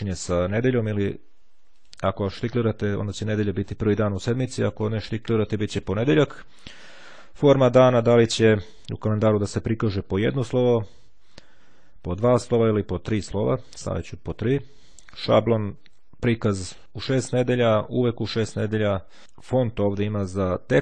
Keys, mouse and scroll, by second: 0.3-2.3 drag, 3.9-5.5 drag, 7.5 click, 12.7 click.